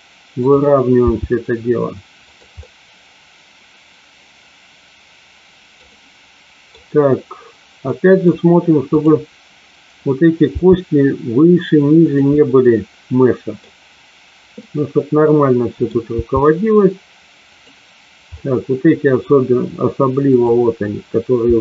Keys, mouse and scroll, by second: 1.1 g, 2.3 click, 2.6-5.8 middle drag, 5.9 middle click, 7.8 middle click, 8.9 click, 10.6 g, 11.9 click, 12.3-13.6 middle drag, 14.6-15.8 middle drag, 16.1 g, 17.4 click, 18.3 middle click, 20.3 click, 21.4 g.